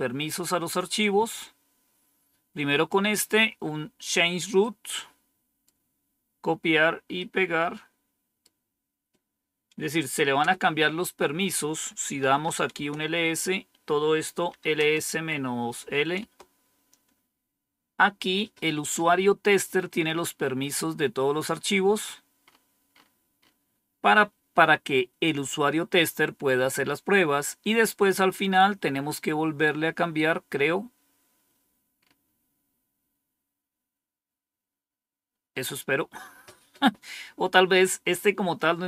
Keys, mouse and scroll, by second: 0.9 click, 4.5 right click, 7.1 right click, 10.3 Return, 11.9-12.8 typing, 14.4-16.2 typing, 19.6-20.2 scroll up 1, 20.2-20.9 scroll up 1, 20.9-24.1 scroll up 1, 25.6-26.4 scroll down 2, 27.0-27.8 scroll down 2, 28.0-29.1 scroll down 2, 30.0-31.1 scroll down 2, 31.1 scroll down 1, 31.9-32.8 scroll up 1.